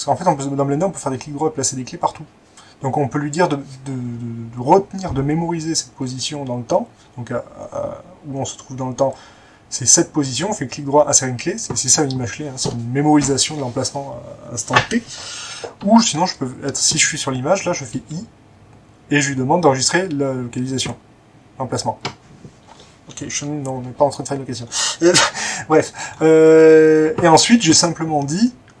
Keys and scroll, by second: 18.0 i.